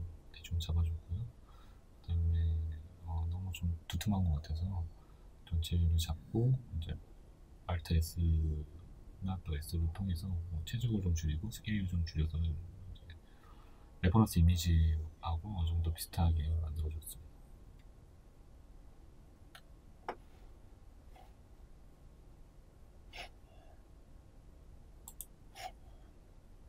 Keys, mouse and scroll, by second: 2.9 click, 3.3 s, 6.7 s, 8.5-8.9 scroll, 8.9 Tab, 9.2 scroll down 1, 9.8 scroll up 1, 10.3-15.9 shift+middle drag, 10.6-11.0 scroll up 1, 11.0 scroll down 1, 12.3-12.7 scroll down 2, 15.9 right click, 16.3-18.1 middle drag, 17.4 w, 18.7-25.6 middle drag, 18.7-19.2 scroll up 2, 19.2-19.7 scroll down 2, 22.4 KP_1, 25.8 middle click.